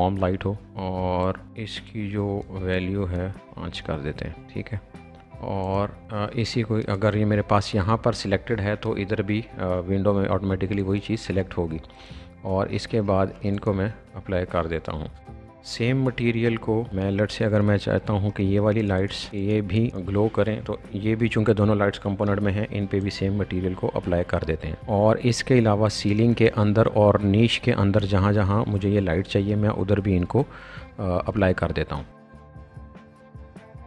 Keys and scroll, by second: 3.4 Return, 15.2 space, 15.3 shift+b, 15.4 space, 16.3 shift+Escape, 22.2 b, 25.5 shift+b, 31.3-33.8 typing, 31.4 Escape, 32.4 Escape.